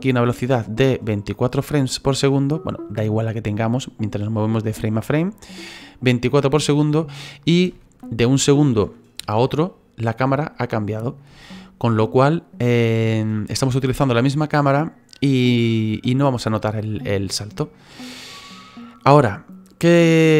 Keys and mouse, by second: 0.1 click, 1.3 click, 9.2 Right, 11.3 Right, 17.9 Left.